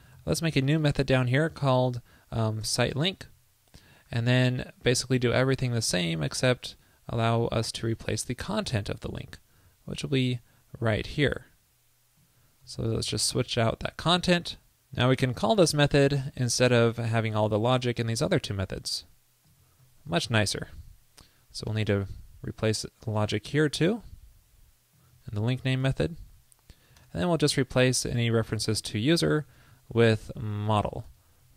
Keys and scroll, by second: 0.3 super+v, 4.3 alt+Right, 13.8 super+Up, 16.8 super+c, 19.7 super+v, 20.2 super+Right, 20.4 alt+shift+Left, 20.6 alt+shift+Left, 25.3 super+v, 25.7 super+Right, 26.0 alt+shift+Left, 26.2 alt+shift+Left, 27.4 alt+Left, 27.9 alt+Right, 29.9 alt+Left, 30.0 alt+Left, 30.1 alt+Left, 31.0 alt+Right, 31.1 alt+shift+Left.